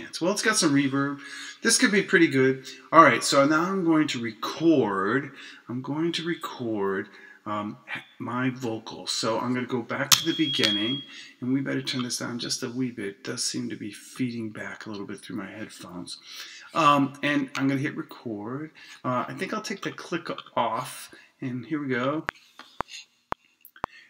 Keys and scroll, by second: 10.1 Return.